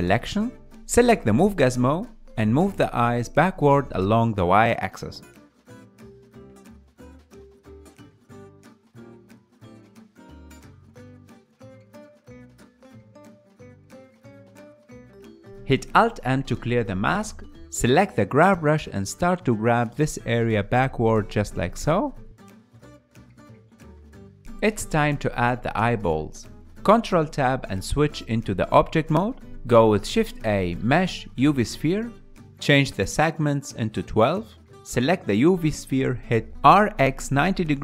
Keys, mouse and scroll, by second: 0.8-3.1 middle drag, 3.1 click, 4.1-6.7 ctrl+middle drag, 6.7 click, 9.0-16.5 ctrl+middle drag, 17.1 alt+m, 17.8-19.4 ctrl+middle drag, 19.4 KP_1, 20.4-22.5 ctrl+middle drag, 22.5 click, 22.6 middle click, 22.7 f, 22.8 click, 23.1 middle click, 23.3 KP_Decimal, 23.4 ctrl+middle click, 23.6 click, 23.7 middle click, 23.8 click, 24.0 middle click, 24.1 click, 24.2 middle click, 24.3-26.1 drag, 26.1-27.3 middle drag, 30.7 shift+a, 31.7-34.4 drag, 34.4-37.6 ctrl+middle drag, 37.6 r.